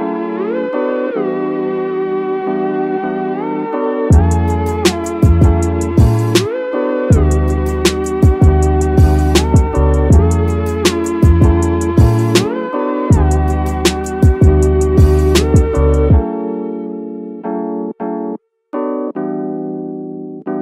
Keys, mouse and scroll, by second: 2.9 middle click, 4.6-7.3 drag, 7.5 shift+middle drag, 7.9-9.1 middle drag, 9.2-9.5 scroll up 2, 9.5 middle drag, 10.0 scroll down 1, 10.2 middle click, 10.7 click, 11.0 scroll up 1, 11.1 middle click, 11.3 Tab, 11.6 shift+middle click, 12.0 middle click, 12.4 scroll up 2, 12.8 shift+middle click, 13.6 click, 13.9 click, 15.1 alt+click, 15.3 alt+click, 15.9 middle click, 16.2 scroll up 2, 16.5 middle click, 18.1 middle click, 19.9 x.